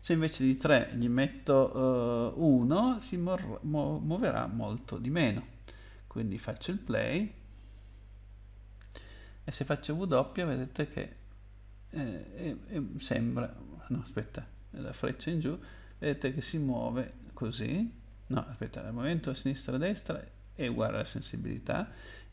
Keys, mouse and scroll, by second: 0.0 click, 1.8 BackSpace, 2.5 1, 6.3 click, 9.8-12.7 typing, 14.7 Up, 15.2 Up, 15.3 Up, 15.4 Up, 15.5 Up, 15.7 Down, 16.3 Down, 16.3 Down, 16.5 Down, 17.1 Left, 17.6 Left, 17.6 Left, 17.8 Left, 18.1 Right, 19.3 Left, 19.8 Right, 20.3 Right, 20.5 Right, 20.7 Left, 21.1 Right, 22.0 Up.